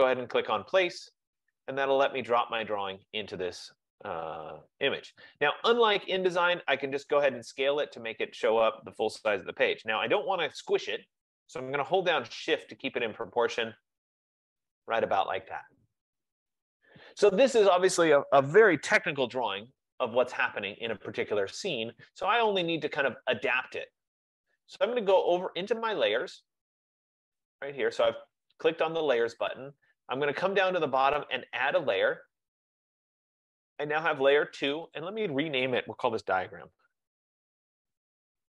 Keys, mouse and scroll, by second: 0.3 click, 1.6 click, 12.0 click, 14.6 shift+click, 15.6 F15, 25.4 click, 32.0 click, 34.8 click, 35.1 click, 36.1-38.1 typing.